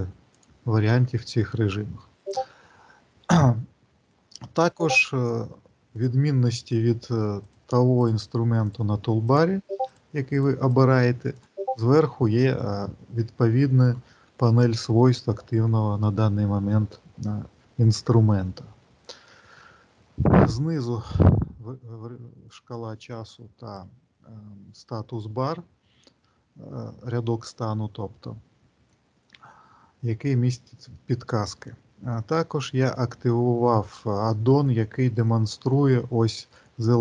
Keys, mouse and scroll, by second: 4.9 click, 22.3 click, 30.8 middle click, 34.9 middle click.